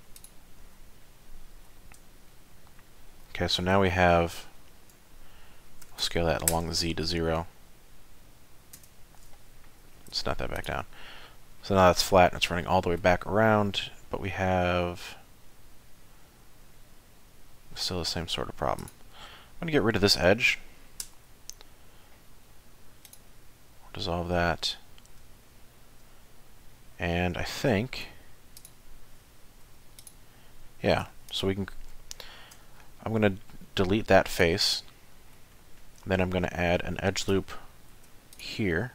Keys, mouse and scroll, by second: 0.2 alt+click, 1.0 middle click, 2.3 shift+middle click, 4.1 1, 5.9 s, 9.8 g, 11.6 middle click, 17.9-18.3 scroll down 2, 18.8 alt+click, 19.2 middle click, 21.0 x, 24.1 middle click, 25.4 shift+middle click, 26.7 middle click, 28.6 click, 29.6 4, 30.0 click, 31.0 3, 31.3 click, 32.5 x, 34.9 middle click, 35.5-36.4 scroll up 3, 36.5 shift+middle click, 37.9 ctrl+r.